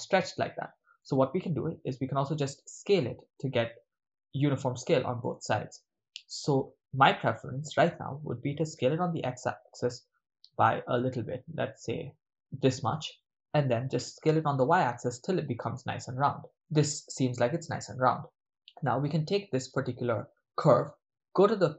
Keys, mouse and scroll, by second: 1.0-1.5 right drag, 1.9 s, 5.2 right click, 8.4 s, 8.7 x, 12.8 ctrl+click, 13.9 s, 14.2 y, 16.5 ctrl+click.